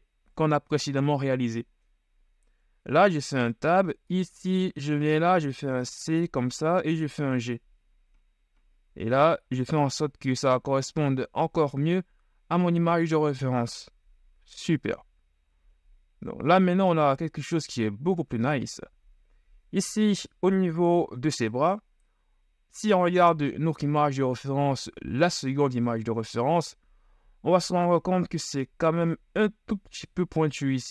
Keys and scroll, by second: 3.2 Tab, 5.8 c, 7.4 g, 14.7 z, 25.3 Right.